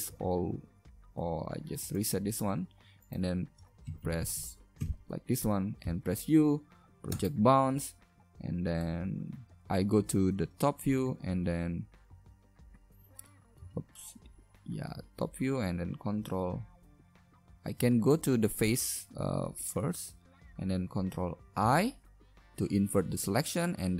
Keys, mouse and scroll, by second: 0.1 u, 3.2 right click, 3.9 ctrl+KP_Add, 4.0 ctrl+KP_Add, 5.8 u, 9.0 middle click, 9.5 KP_7, 10.9 a, 11.1 a, 13.1 ctrl+z, 13.7 ctrl+z, 17.7 ctrl+Tab, 21.6 ctrl+i.